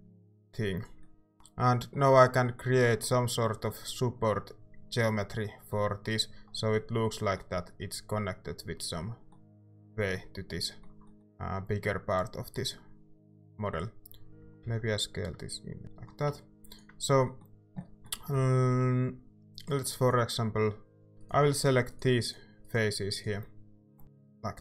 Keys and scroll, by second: 1.3 Tab, 2.0 Tab, 14.1-15.1 typing, 16.2 a, 21.1 ctrl+z.